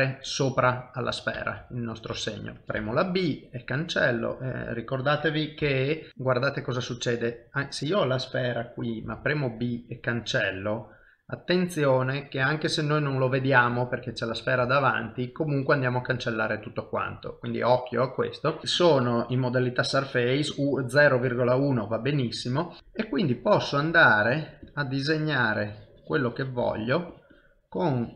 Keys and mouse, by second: 0.6-2.5 ctrl+z, 2.6 shift+middle click, 2.8 b, 4.3 middle click, 5.6 b, 6.1 middle click, 11.3 middle click, 14.6 ctrl+z, 15.8 ctrl+middle click, 16.5 middle click, 19.0 middle click, 20.1 click, 22.8 middle click, 23.4 click, 24.2-28.1 click.